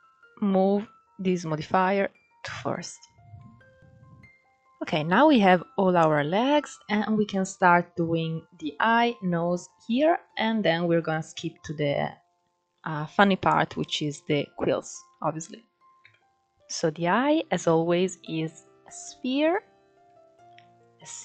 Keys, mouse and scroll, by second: 2.6 scroll down 2, 3.1-3.8 middle drag, 3.8-4.3 scroll up 2, 4.3-4.9 scroll down 2, 4.9 scroll up 2, 5.2-12.4 middle drag, 12.4-12.9 scroll up 2, 12.9-13.2 scroll down 1, 13.2-15.7 middle drag, 15.7 KP_1, 16.5 shift+a, 17.2 shift+a, 19.6-20.5 scroll down 4, 20.5-20.9 drag.